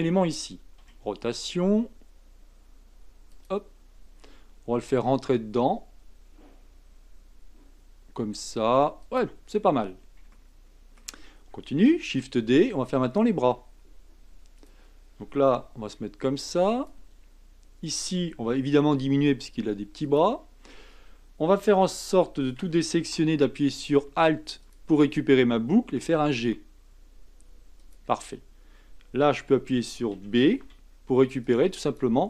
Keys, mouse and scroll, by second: 0.8 r, 4.8 g, 10.3 shift+middle click, 11.0-12.0 scroll up 1, 12.0 shift+d, 15.5 r, 18.5 s, 22.5 a, 24.6 alt+click, 26.0 g, 30.1 a, 30.6 b.